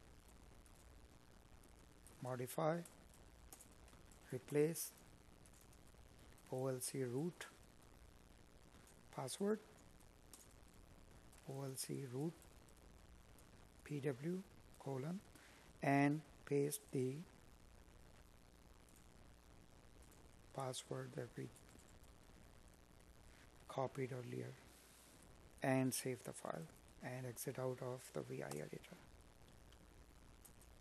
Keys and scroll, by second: 3.6 Tab, 8.4 space, 14.3 Escape, 18.2 space, 28.9 space, 30.6 space.